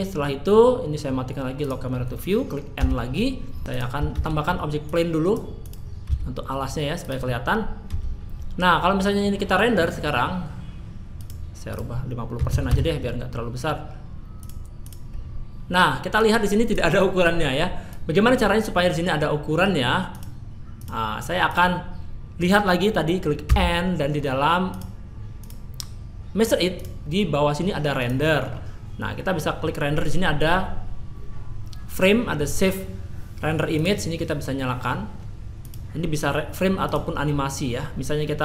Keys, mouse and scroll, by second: 1.6 click, 2.8 n, 3.6 click, 3.7 click, 4.1 shift+a, 6.1 s, 7.9 a, 11.2 click, 11.7 click, 14.4 click, 24.7 click, 25.4 click, 26.8 click, 28.0 click, 28.4-32.0 scroll down 2, 32.0-32.4 scroll down 1, 33.8 click, 35.6 click.